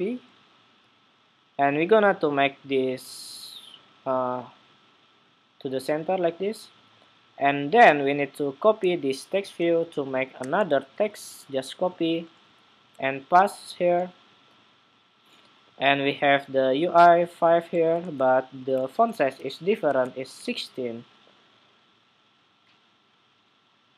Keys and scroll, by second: 10.5 super+c, 12.4 super+v, 17.7 super+a, 18.5 super+c, 19.7 Escape, 19.9 ↺.